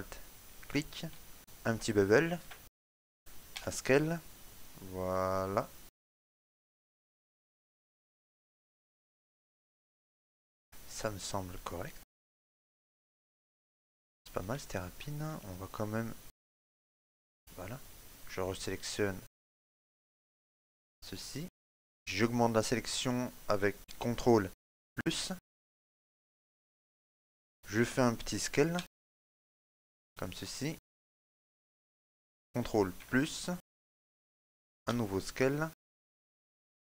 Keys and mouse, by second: 0.4 alt+shift+right click, 1.4 ctrl+b, 3.7 s, 6.1 middle click, 7.3 shift+middle click, 7.8 ctrl+middle click, 8.1 middle click, 9.6 shift+middle click, 9.8 shift+middle click, 10.6 ctrl+middle click, 11.0 middle click, 12.7 shift+middle click, 13.0 middle click, 14.4 shift+middle click, 14.7 ctrl+middle click, 15.3 middle click, 17.2 click, 18.2 right click, 19.7 shift+right click, 20.6 shift+right click, 21.0 shift+right click, 21.3 shift+middle click, 21.7 middle click, 25.1 ctrl+KP_Add, 28.9 s, 31.2 middle click, 33.1 ctrl+KP_Add, 35.0 s.